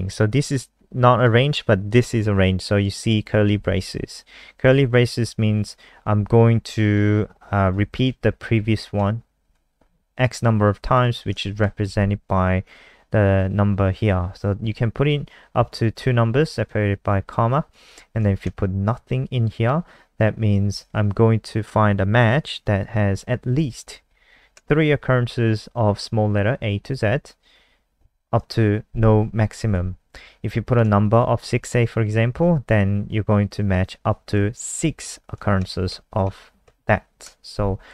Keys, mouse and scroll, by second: 0.4 click, 4.0 Left, 4.1 Left, 4.3 Right, 4.4 Right, 4.6 Right, 5.3 Right, 6.0 Left, 6.2 Left, 7.8 Left, 8.4 shift+Left, 8.5 shift+Left, 8.7 shift+Left, 8.9 shift+Left, 10.9 click, 11.5 shift+Right, 16.6 click, 18.4 Right, 20.6 Left, 22.7 Left, 23.6 shift+Left, 23.8 shift+Left, 23.9 shift+Left, 24.1 shift+Left, 24.3 shift+Left, 27.0 Right, 27.2 Right, 27.4 Right, 27.5 Right, 30.1 Down, 30.9 shift+Right, 34.6 Left, 34.8 Left, 34.9 Left, 35.0 Left, 35.8 ctrl+shift+Left, 36.1 ctrl+shift+Left.